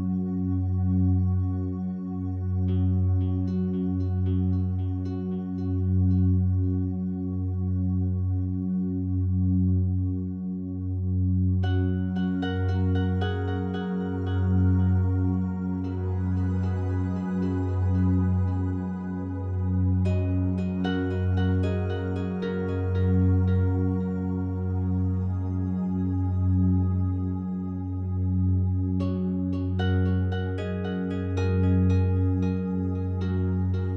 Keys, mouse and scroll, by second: 0.3-4.5 alt+drag, 4.5 s, 7.6 click, 8.4-10.4 alt+drag, 15.1-19.2 drag, 19.2 ctrl+z, 22.6-25.9 drag, 25.9 e.